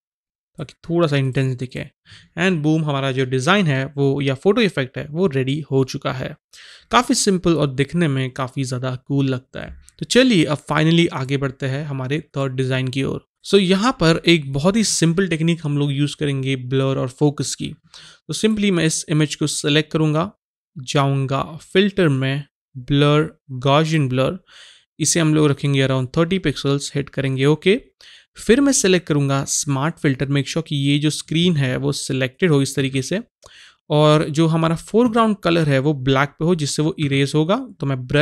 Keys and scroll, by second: 13.3 Right.